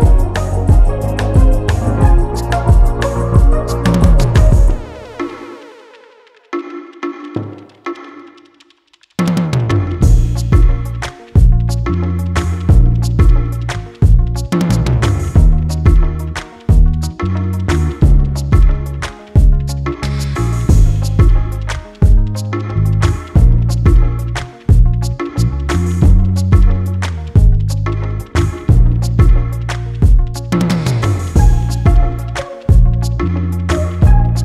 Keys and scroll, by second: 6.9-9.7 typing, 15.9 ctrl+z, 19.6 [, 20.1 [, 20.7 [.